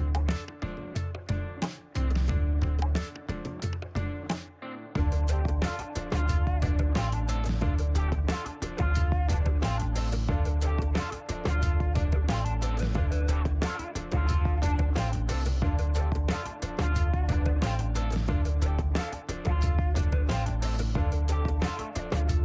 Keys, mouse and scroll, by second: 1.3 click, 2.6 middle click, 6.0 click, 7.3 click, 8.7 KP_1, 8.7 KP_5, 9.0 Return, 10.8-12.2 drag, 13.5-14.8 drag, 15.9-17.2 drag, 17.9 click, 19.5 click, 21.8 KP_4, 21.9 KP_0, 22.0 KP_Enter.